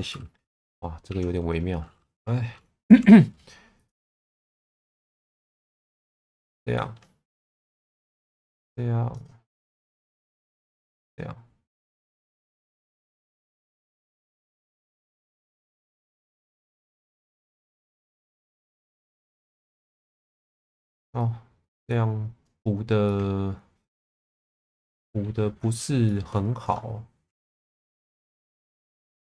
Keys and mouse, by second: 0.6 f, 1.1 1, 2.8 k, 6.7-17.5 middle drag, 17.8 Tab, 18.2 middle click, 18.7 Tab, 19.3 1, 20.3 middle click, 21.2 click, 23.0-25.2 alt+middle drag, 26.0 shift+middle click, 26.6 click, 27.2 shift+v, 28.0 click.